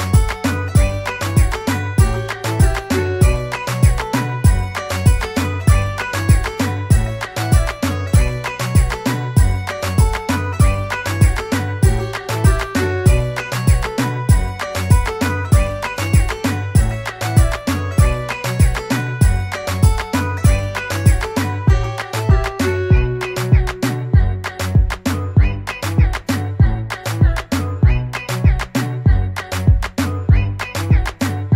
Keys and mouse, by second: 1.3 click, 4.3 click, 4.4 click, 6.6 click, 10.8 click, 21.9 click, 23.5 click, 23.7 click, 28.1 click.